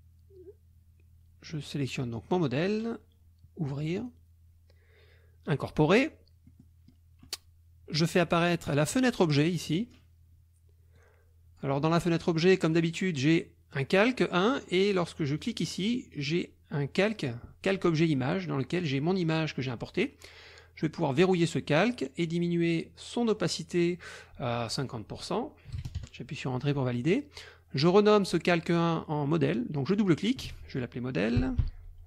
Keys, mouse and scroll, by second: 2.2 click, 3.9 click, 5.5 click, 6.4 middle click, 9.0 click, 9.7 click, 10.9 click, 12.6 click, 15.4 click, 16.1 click, 21.2 click, 24.9 click, 25.7 KP_5, 26.0 KP_Enter, 29.9 click, 31.1-32.0 typing.